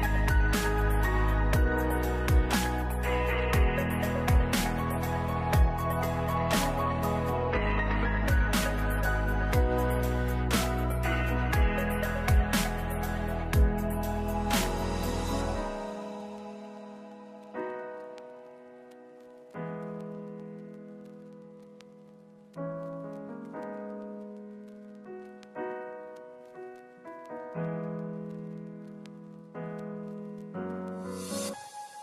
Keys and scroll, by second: 1.0 1, 1.4 0, 3.1 ctrl+a, 4.5 ctrl+s, 6.3-7.2 typing, 11.5 ctrl+s, 13.7 6, 16.5 ctrl+s, 20.2-21.6 typing, 25.2 ctrl+s.